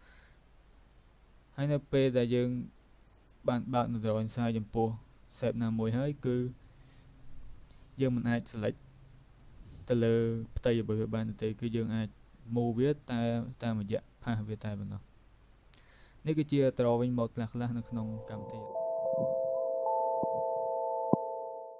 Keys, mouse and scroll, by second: 0.7 click, 2.9 click, 3.6 click, 4.1 click, 8.2 click, 8.8 click, 10.3 click, 10.9 click, 11.5 click, 13.1 click, 14.1 click, 14.8 click, 15.5 click, 17.6 click.